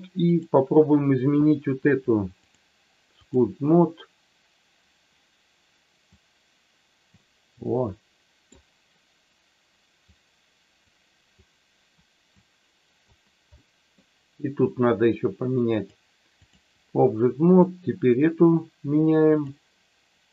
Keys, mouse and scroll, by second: 0.2 click, 2.3-3.3 drag, 6.1-7.1 drag, 7.6 middle click, 10.0 click, 11.3 click, 12.4 click, 13.5 middle click, 15.7 click, 17.5 click, 19.2-20.3 drag.